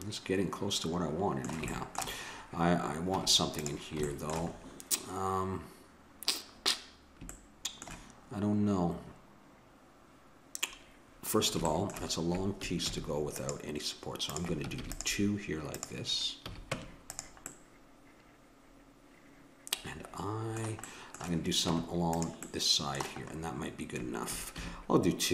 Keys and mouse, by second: 3.1 Tab, 12.9 ctrl+r, 14.8 ctrl+r, 16.4 a, 16.7 Tab, 17.5-18.9 middle drag, 20.8-24.5 middle drag, 21.7 Tab, 24.9 ctrl+r.